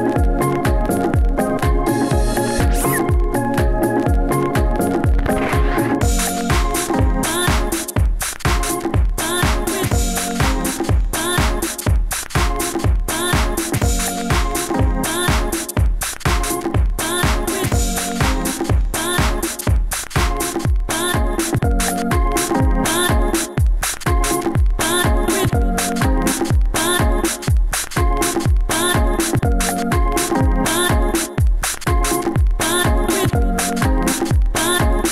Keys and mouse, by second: 0.2 middle drag, 1.4 ctrl+s, 1.9 g, 2.7-3.0 middle drag, 4.3-5.7 middle drag, 5.7 Tab, 5.9 a, 6.1 a, 6.2 ctrl+f, 7.4 Tab, 11.3 Tab, 11.4-13.3 drag, 14.6-16.4 middle drag, 16.4 v, 16.9 v, 17.4 middle click, 17.7 g, 19.2 f, 19.3 a, 20.3 f, 20.3 a, 20.8 ctrl+z, 20.9 ctrl+z, 21.6-22.8 typing, 23.0 alt+z, 24.3 f, 24.5 alt+z, 24.9 a, 25.6 k, 27.0 a, 27.4 click, 27.4 g, 28.1 click, 28.3 a, 28.5 a, 28.7 ctrl+f, 30.5 middle click, 31.9 ctrl+e, 33.6 a, 33.8 a, 34.2 ctrl+n, 34.4 a.